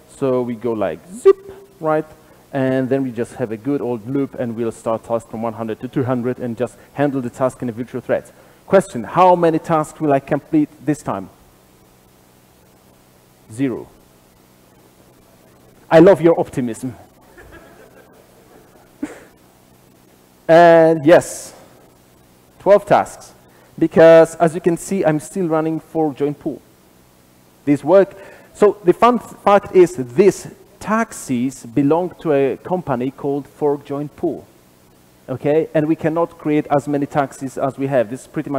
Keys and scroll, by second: 0.7 super+/, 2.5 super+b, 12.6 ctrl+r, 12.6 shift+F10.